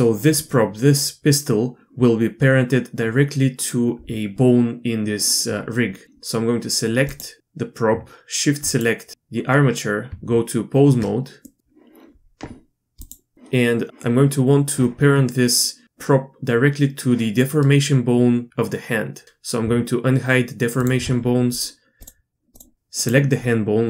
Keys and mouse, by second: 8.7 shift+click, 10.1 Tab, 11.4-13.0 middle drag, 13.0 click, 20.8 shift+drag.